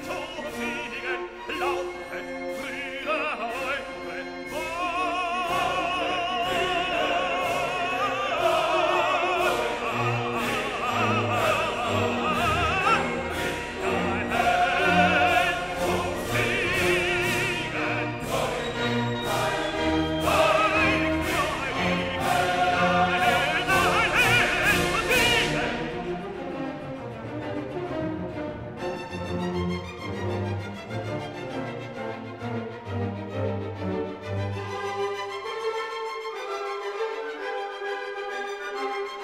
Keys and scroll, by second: 15.3 Escape, 27.2 ctrl+g, 30.1 shift+Up.